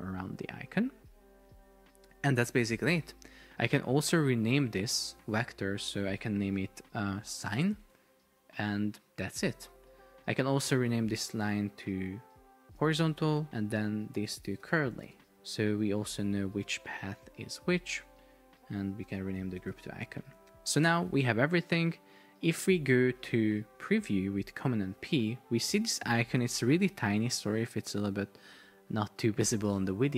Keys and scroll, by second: 6.4 super+r, 7.2 shift+s, 7.9 Return, 12.9 shift+h, 13.4 BackSpace, 14.2 Return, 14.4 shift+c, 15.1 Return, 19.1 shift+i, 19.7 Return, 24.7 super+p, 26.7 shift+super+4, 28.2 Escape.